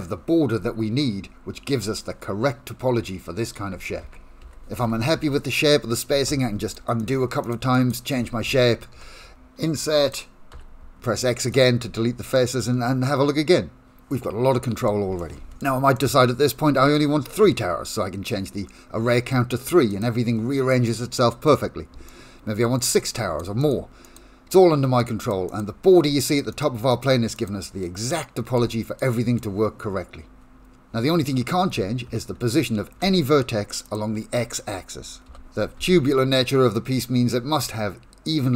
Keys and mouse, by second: 1.5 3, 4.1 ctrl+z, 4.4 ctrl+z, 4.9 ctrl+z, 5.2 ctrl+z, 7.0 shift+click, 7.4 shift+click, 7.7 shift+click, 9.0 i, 10.5 x, 12.3-14.9 middle drag, 15.2 shift+middle click, 16.0-17.0 middle drag, 20.7 middle click, 22.1 shift+middle click, 22.7 middle click, 23.3 click, 23.6 click, 24.1 click, 25.0 click, 26.3 click, 26.9 click, 27.4 click, 28.0 middle click, 28.7 shift+middle click, 29.1 middle click, 33.1 1, 33.9 click, 35.3 g.